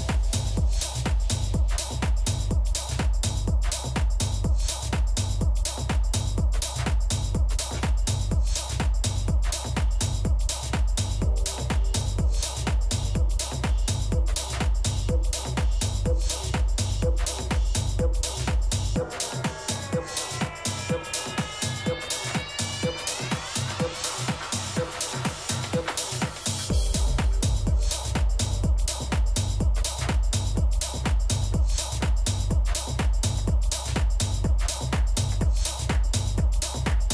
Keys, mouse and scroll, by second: 2.7 g, 6.7 a, 7.4 a, 7.8 a, 8.1-10.6 middle drag, 11.7 KP_3, 13.3 middle click, 14.3 a, 14.9 a, 16.2 b, 19.2 g, 21.6 a, 24.4-26.7 drag, 25.4 a, 25.7 a, 26.7 b, 28.1 g, 31.0 a, 32.6 b, 34.4 g.